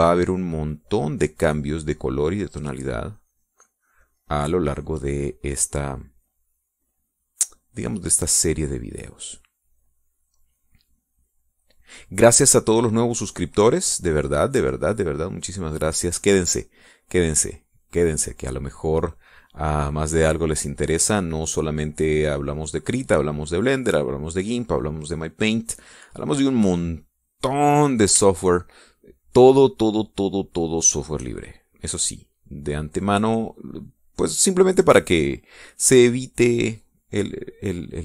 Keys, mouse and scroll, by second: 7.2 middle click, 9.0-12.0 drag, 12.3-16.9 drag, 17.0-27.7 drag, 28.4 middle click, 28.9-29.5 scroll up 1, 29.5 shift+scroll up 1, 29.6-32.6 shift+drag, 32.6-33.8 shift+scroll up 1, 34.0-36.6 drag, 36.6-38.0 scroll up 1.